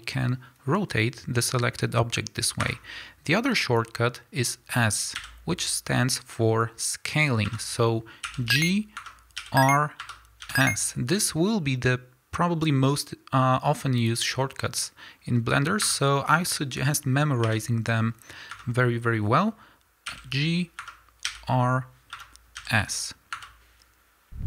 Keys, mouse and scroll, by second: 2.7 Escape, 5.1 s, 7.5 Escape, 9.4 r, 10.1 Escape, 10.4 s, 15.9 Escape, 17.4 r, 18.6 Escape, 20.0 g, 20.9 Escape, 21.2 r, 22.2 Escape, 22.5 s, 23.4 Escape.